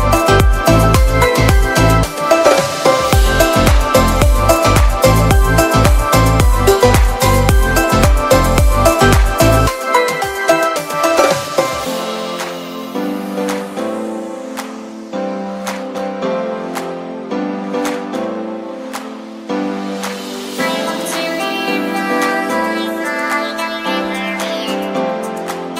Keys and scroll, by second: 3.0 shift+super+g, 4.5 space, 5.5 i, 10.2 b, 11.1 ], 16.2 v, 19.4 v, 20.0 super+v, 20.2 super+t, 20.7 alt+super+t, 24.4 super+j, 25.0 super+y.